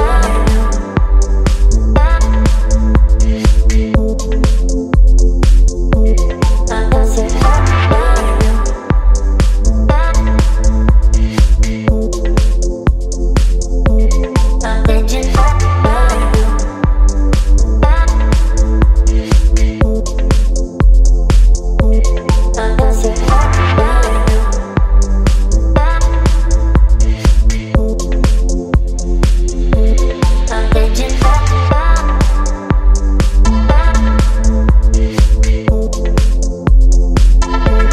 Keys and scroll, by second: 0.1 Return, 3.6-7.8 typing, 18.8 v, 21.3 space, 22.6 space, 23.2 t, 24.0 KP_5, 24.1 KP_0, 24.8 ctrl+a, 30.0 shift+5, 33.3 v, 33.6 space, 35.2 ctrl+t, 37.1 Return, 37.8 t.